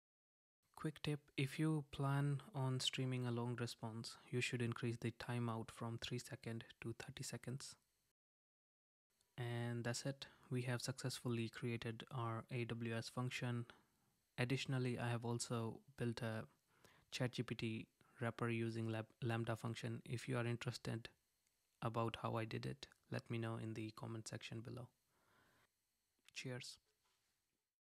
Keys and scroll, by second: 10.4 super+r, 19.9 Return.